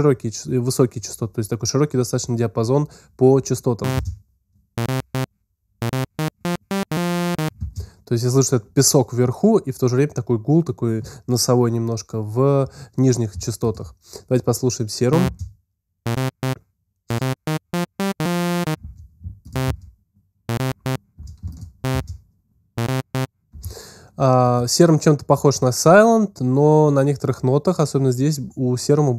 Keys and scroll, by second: 3.8 space, 7.4 space, 15.1 space, 18.6 space, 20.4 space, 21.2 alt+space, 22.5 space.